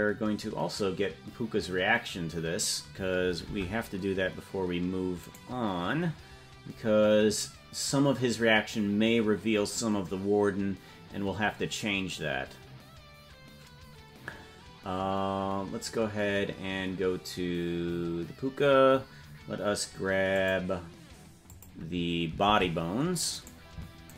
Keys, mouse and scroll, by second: 3.6 ctrl+Tab, 5.5 right click, 20.5 click, 22.0 click, 23.0 ctrl+Tab, 24.0 right click.